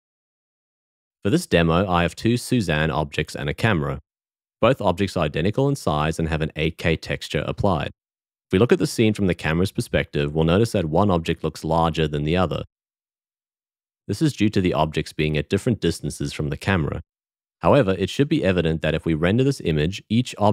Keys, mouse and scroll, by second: 8.9 q, 12.0 q.